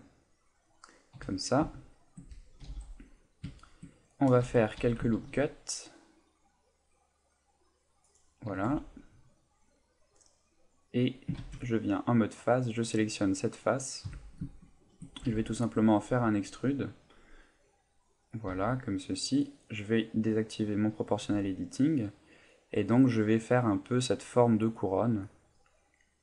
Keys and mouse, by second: 1.1 KP_1, 1.8 shift+middle click, 2.6 g, 3.4 click, 3.6 shift+middle click, 4.4 Tab, 5.1 ctrl+r, 8.2 click, 8.7 a, 10.2 middle click, 11.4 ctrl+Tab, 12.3 right click, 12.7 middle click, 13.4 middle click, 14.0 KP_1, 14.6 shift+middle click, 15.3 e, 18.3 click, 18.5 g, 19.4 right click, 20.2 click, 21.2 g.